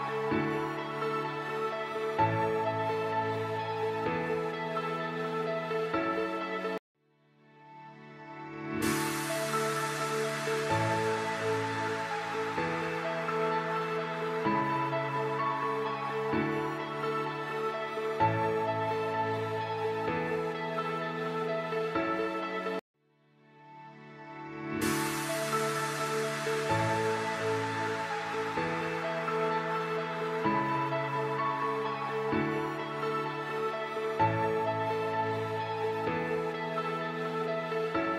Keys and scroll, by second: 1.9 shift+Page_Down, 2.5 alt+c, 3.1 shift+F2, 4.2 F4, 6.5 ctrl+g, 7.1 c, 7.7 shift+F2, 9.9 shift+Page_Up, 13.2 F4, 13.5 Escape, 23.1 F2, 26.2 F2, 29.9 space, 32.1 ctrl+k, 32.3 Escape, 35.9 F3.